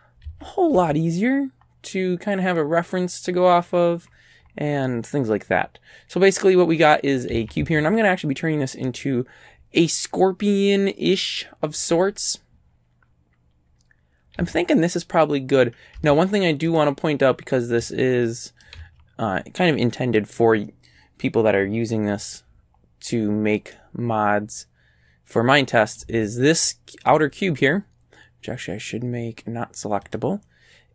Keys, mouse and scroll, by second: 0.3 a, 0.8 a, 1.6 scroll down 1, 4.1-4.9 scroll up 6, 5.6 scroll up 1, 7.4 a, 7.6 a, 8.9 right click, 12.7 scroll up 1, 13.7 scroll down 1, 14.4 a, 16.0 Tab, 16.7 click, 17.8-18.8 right drag, 18.8 a, 22.8-23.3 scroll up 4, 23.7 middle click, 24.5-26.2 drag, 26.6 right click, 30.1 click.